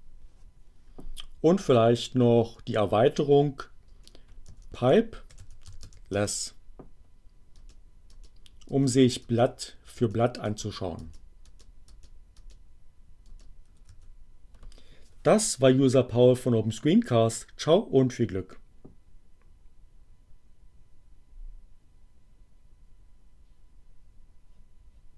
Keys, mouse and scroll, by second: 1.2 space, 1.4 Up, 3.8 space, 4.3 alt+<, 4.5 alt+space, 5.0 alt+l, 5.1 alt+e, 5.2 alt+s, 6.2 alt+Return, 7.2 space, 13.9 q.